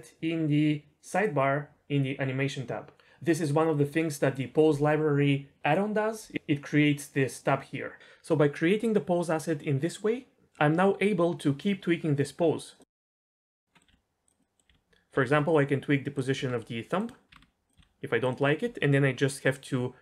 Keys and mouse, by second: 12.8 click, 13.3-13.7 drag, 13.7 middle click, 13.9-14.8 r, 14.2 drag, 14.4-14.7 middle drag, 14.8 ctrl+z, 15.1 r, 15.3 r, 16.2 click, 16.4 r, 17.3 r, 17.3 r, 17.8 r.